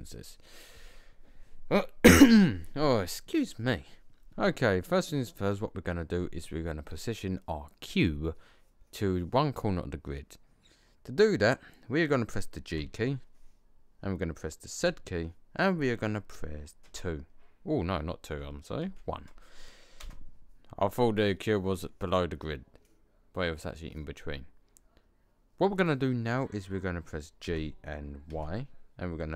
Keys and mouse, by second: 4.5-4.9 drag, 5.4-7.0 middle drag, 12.6 g, 27.4 g.